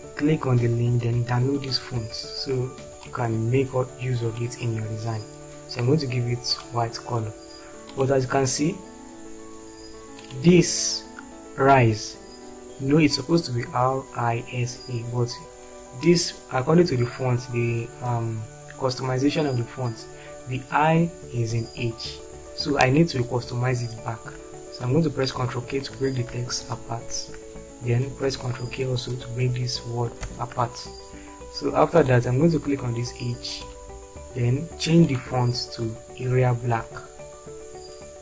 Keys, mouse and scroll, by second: 26.6 ctrl+k, 30.2 ctrl+k, 36.7 typing.